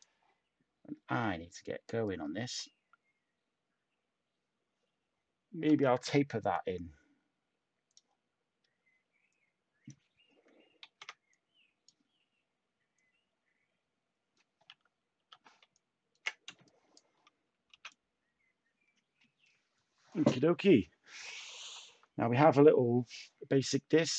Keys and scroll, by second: 10.8 ctrl+z, 15.1 t, 16.4 a.